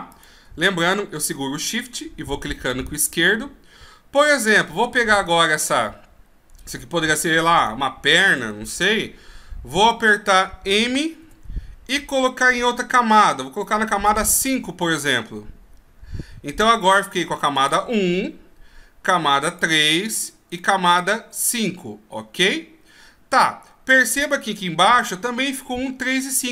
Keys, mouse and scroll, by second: 0.2 shift+click, 5.5 right click, 6.7 shift+right click, 7.7 right click, 8.2 shift+right click, 11.3 m, 17.7 click, 19.6 click, 21.1 click.